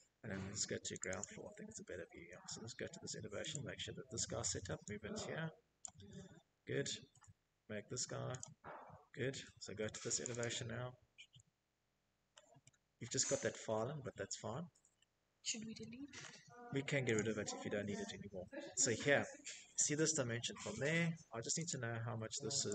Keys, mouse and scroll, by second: 0.0 Escape, 0.0 middle click, 0.2 middle click, 0.2 middle click, 0.4 middle click, 1.3 click, 3.7 click, 4.0 middle click, 4.2 middle click, 4.2 Escape, 5.2 middle click, 5.4 middle click, 6.2 click, 7.6 Escape, 8.0 click, 8.2 click, 8.8 scroll, 10.4 middle click, 10.8-13.2 scroll, 13.2 middle click, 13.4 middle click, 13.5 Escape, 13.9 Escape, 14.0 middle click, 14.1 middle click, 14.3 middle click, 15.0 click, 15.7-17.1 scroll, 16.5 Escape, 17.8 scroll, 18.2-18.6 typing, 19.5 click, 20.3 middle click, 20.3 right click, 20.5 right click.